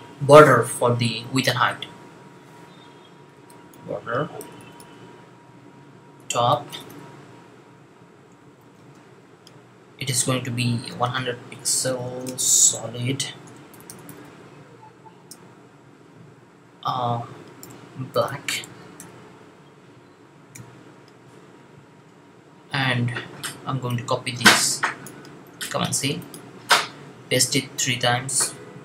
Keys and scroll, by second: 3.2-4.6 typing, 6.0-6.8 typing, 8.3-8.7 typing, 10.5-15.1 typing, 17.2-18.7 typing, 20.4 typing, 25.5 super+c, 28.2 super+v.